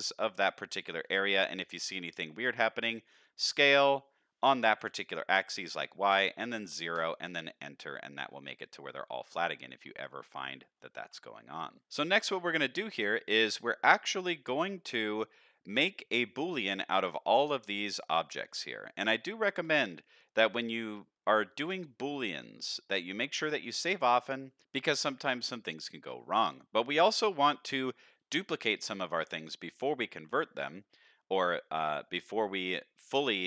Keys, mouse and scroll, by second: 0.0 shift+click, 0.4 shift+click, 0.7 shift+click, 1.1 middle click, 1.7 shift+middle click, 3.5 s, 8.1 shift+middle click, 8.8-9.6 scroll down 4, 9.6 shift+middle click, 10.0 middle click, 11.0 Tab, 11.3 middle click, 11.7 scroll down 1, 11.8 alt+a, 12.0 shift+middle click, 12.8-14.9 middle drag, 15.1-15.5 middle drag, 16.2 middle click, 17.4 click, 17.7 middle drag, 18.4 shift+drag, 18.7-19.1 middle drag, 19.5 shift+click, 19.8-20.2 middle drag, 20.6 shift+click, 21.0-21.3 middle drag, 22.1 shift+click, 22.7-23.2 middle drag, 23.7 shift+click, 24.1-24.5 middle drag, 25.4-25.9 middle drag, 26.2 shift+middle drag, 27.2 shift+middle click, 27.6 middle drag, 28.1 shift+middle drag, 28.9 shift+middle drag, 30.2-30.6 middle drag.